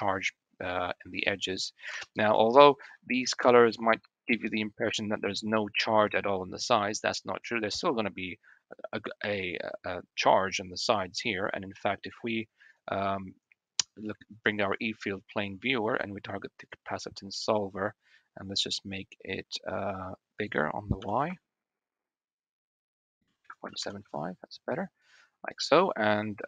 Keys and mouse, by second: 1.1 click, 1.8 KP_1, 2.6 shift+middle click, 11.9 click, 20.3-21.4 drag, 22.6-24.3 drag.